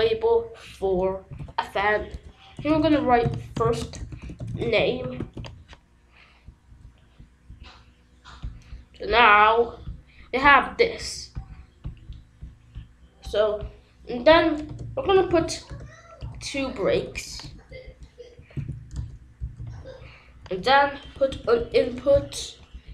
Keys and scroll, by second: 1.0-5.1 typing, 5.2 ctrl+s, 14.6 Return, 15.0 b, 15.2 r, 15.6 Return, 16.9 BackSpace, 18.0-19.0 typing, 20.8-22.1 typing, 22.8 Return.